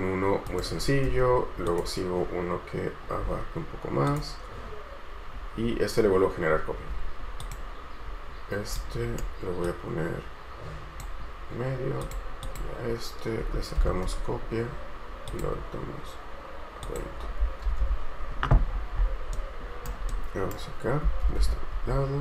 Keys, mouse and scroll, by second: 1.3 space, 3.4 scroll down 1, 6.7-7.5 scroll up 1, 8.9 right click, 12.6 double click, 13.6-14.0 typing, 17.8 Escape, 18.0 Escape, 18.8-19.5 scroll down 1, 19.5 right click, 21.4 Escape, 21.6 Escape, 22.0 scroll up 1.